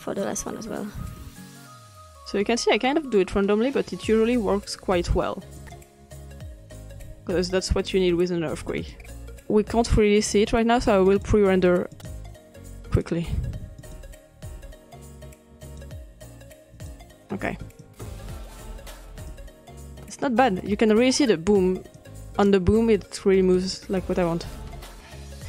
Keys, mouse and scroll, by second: 0.2 click, 0.6-5.4 drag, 5.6-7.1 drag, 8.7 click, 11.0-12.9 drag, 13.1-13.8 drag, 14.0-15.4 drag, 15.8-16.8 drag, 16.9 click, 17.6 click, 19.2 click, 20.0-22.0 drag, 22.4 click, 23.6 click.